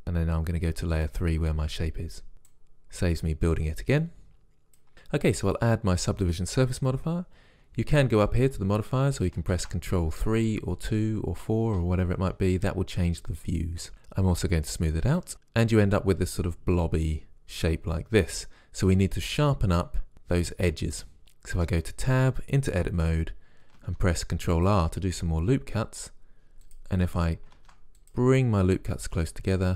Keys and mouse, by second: 1.0-5.5 drag, 9.6 ctrl+3, 15.2-21.6 drag, 21.6 Tab, 23.9 ctrl+r, 27.7 ctrl+r.